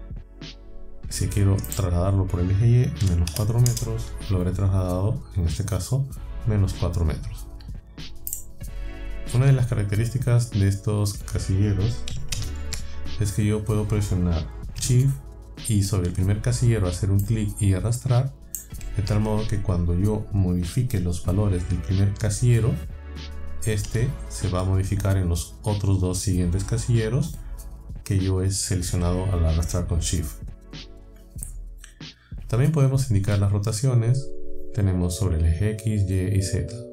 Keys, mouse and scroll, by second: 1.7 click, 3.0 KP_Subtract, 3.3 KP_4, 3.7 KP_Enter, 8.3 click, 12.4 ctrl+z, 17.3-18.8 shift+drag, 23.9 KP_2.